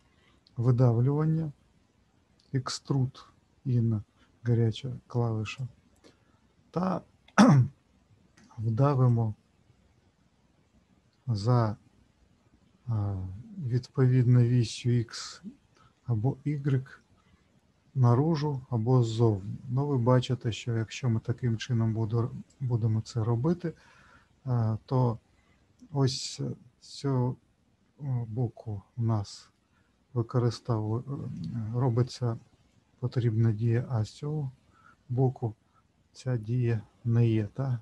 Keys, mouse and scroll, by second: 5.4 click, 9.1 click, 28.3 middle click, 30.4 middle click, 37.4 middle click.